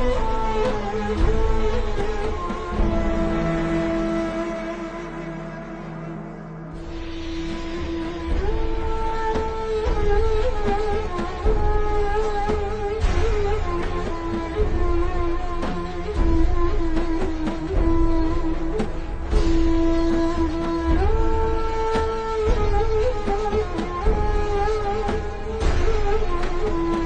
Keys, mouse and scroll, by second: 1.3 click, 6.4 click, 9.2 v, 9.3 click.